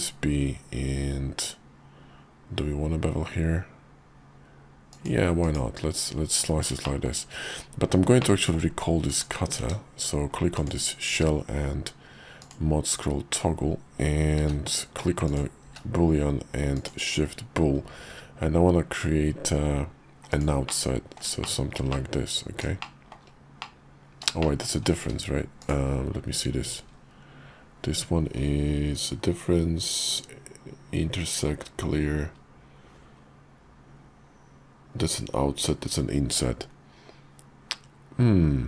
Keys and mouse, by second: 6.8 shift+middle click, 8.2 middle click, 9.1 click, 9.6 q, 10.5 click, 11.1 q, 15.6 q, 20.7 middle click, 21.4 shift+middle click, 21.9 middle click, 22.8 shift+middle click, 23.6 middle click, 24.4 shift+middle click, 25.0 q.